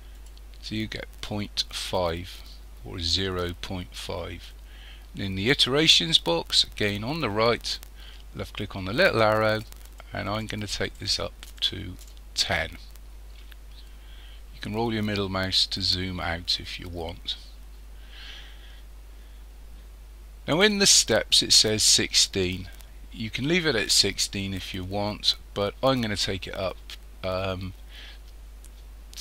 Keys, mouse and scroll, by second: 9.0 click, 14.0-17.1 scroll down 6, 17.1-17.5 scroll up 2, 17.5-19.8 scroll down 1.